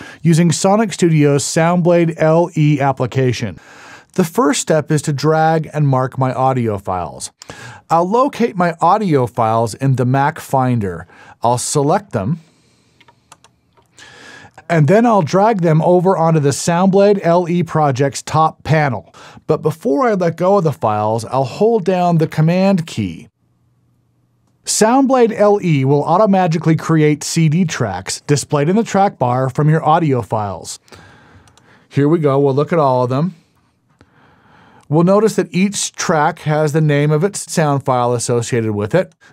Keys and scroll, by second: 33.1 super+e.